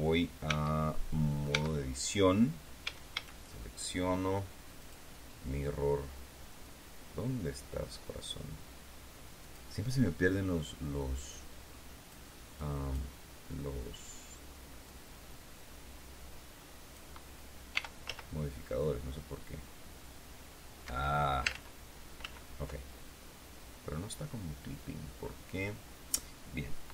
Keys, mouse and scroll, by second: 0.4 Tab, 1.4 Tab, 2.7 a, 4.7 click, 9.3 click, 11.1-12.2 drag, 12.5 click, 14.8-17.0 drag, 17.6 r, 18.0 z, 20.7 Escape, 21.4 ctrl+z, 22.1 ctrl+z.